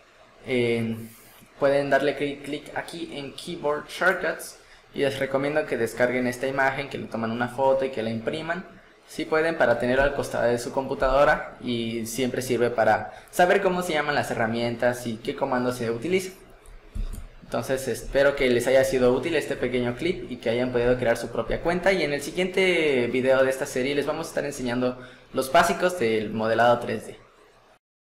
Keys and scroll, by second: 17.0 Escape.